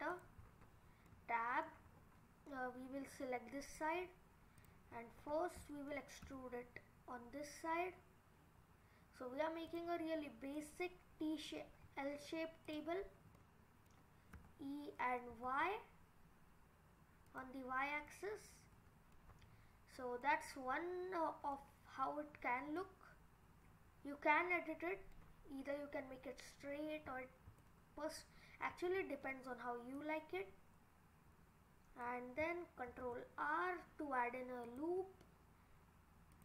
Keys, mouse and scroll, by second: 0.1 click, 0.5-1.0 scroll down 6, 1.2 middle click, 1.9-2.3 scroll up 4, 3.1 click, 4.6 click, 5.2 scroll down 3, 6.2 e, 10.2-10.6 scroll down 2, 10.6 middle click, 12.0-12.7 scroll up 5, 12.7 click, 13.4 middle click, 14.3 e, 17.7-18.1 scroll down 3, 18.1 middle click, 19.1 middle click, 19.4-20.0 scroll up 4, 20.0 scroll down 3, 20.2 middle click, 22.0-22.3 scroll up 3, 22.5-23.1 scroll down 2, 22.8 middle click, 27.1 scroll up 5, 27.6 middle click, 28.9-30.0 scroll up 2, 30.0 click, 32.9 ctrl+r.